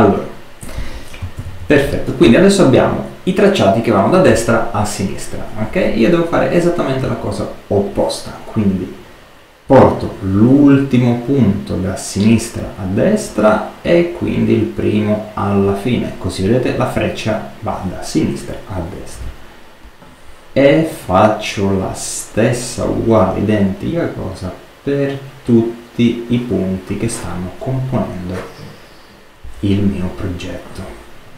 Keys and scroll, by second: 1.3 super+-.